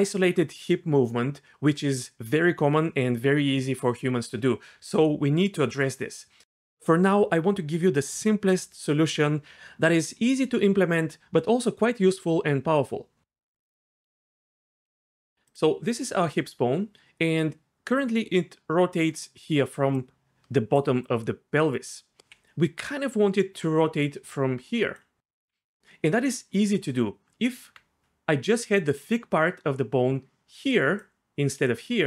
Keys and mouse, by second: 15.4 click, 18.0 r, 19.4-21.8 d, 22.6-25.4 d, 27.2 Tab, 30.4-32.0 d, 31.6 click.